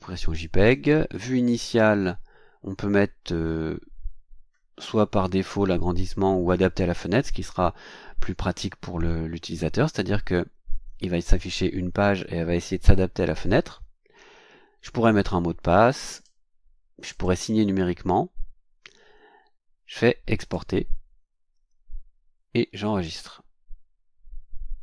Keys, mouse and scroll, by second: 0.6 click, 16.1 click, 17.1 click, 20.3 click, 23.0 click.